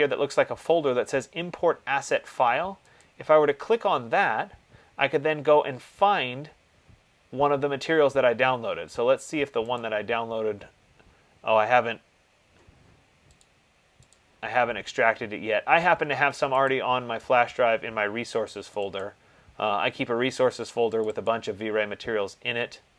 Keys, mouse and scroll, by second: 3.2 click, 10.0 click, 13.7 click, 14.4 click, 16.9 click, 18.9 click, 19.3 click, 21.2 click, 21.5 click.